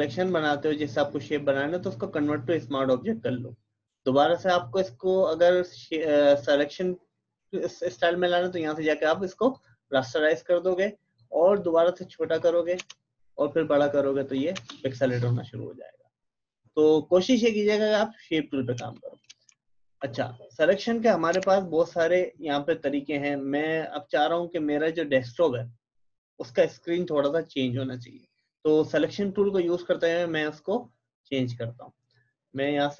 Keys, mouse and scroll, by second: 0.1 click, 1.8-3.2 typing, 7.0 right click, 9.5-15.2 drag, 17.9 click, 18.8 space, 18.9 click, 19.2 space, 19.6 alt+scroll down 1, 20.2 click, 21.3 Delete, 25.3 click, 31.4 click.